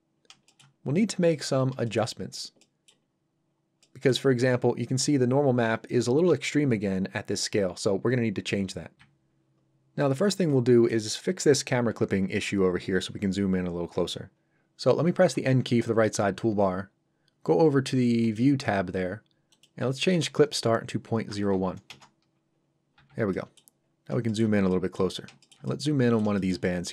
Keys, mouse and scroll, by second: 0.4 shift+middle click, 0.9 middle click, 1.0 middle click, 1.6 scroll up 1, 1.8 shift+middle click, 2.5 middle click, 3.0-3.5 scroll up 1, 3.8 middle click, 10.0 middle click, 18.2 click, 21.3 KP_0, 21.9 Return, 22.9 n, 23.3 middle click, 23.8-24.1 scroll up 1, 24.3 shift+middle click, 24.7 middle click, 25.1 scroll up 1, 25.4 shift+middle click, 25.6 middle click, 26.3 shift+middle click, 26.6 middle click, 26.7 middle click.